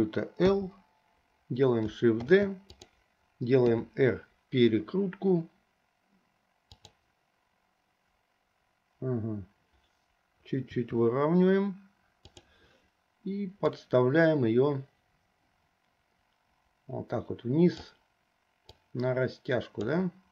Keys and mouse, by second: 0.6 l, 2.3 shift+d, 3.7 r, 10.8 r, 13.7-18.0 drag, 19.1-20.1 drag.